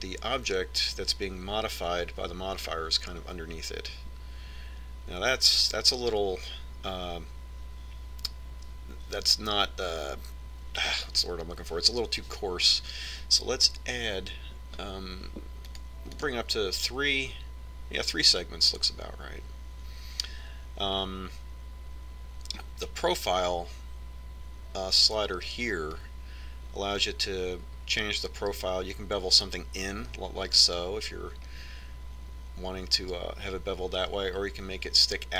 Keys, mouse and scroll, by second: 16.9-19.4 drag, 27.2-29.6 drag.